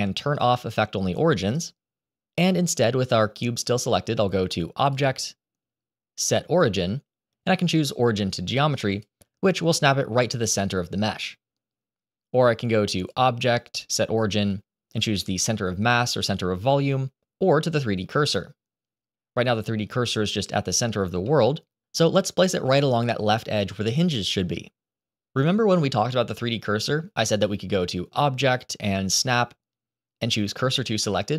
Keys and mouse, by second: 4.8-10.2 drag, 13.0-19.1 drag, 21.2-22.1 middle drag, 26.7-31.3 drag.